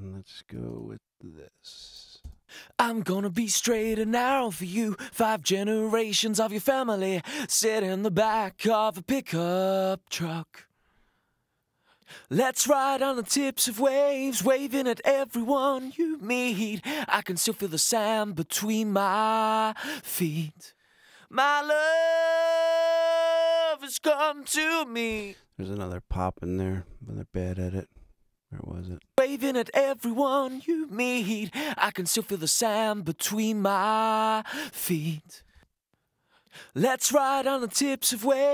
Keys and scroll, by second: 2.2 super+space, 3.0 space, 4.5 super+=, 25.1 space, 28.9 space, 35.4 space.